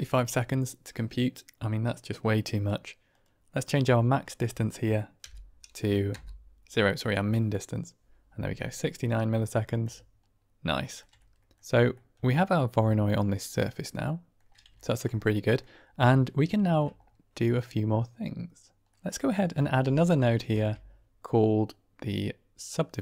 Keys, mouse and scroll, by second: 3.0-7.9 drag, 9.2-9.7 middle drag, 10.6 shift+middle drag, 11.1-11.4 drag, 11.8 drag, 12.2-13.4 scroll up 1, 13.4-14.3 middle drag, 14.7 ctrl+middle drag, 15.1-15.5 middle drag, 16.1 middle drag, 16.5 shift+click, 18.8 click, 19.2 drag, 19.7 g, 20.4 shift+a.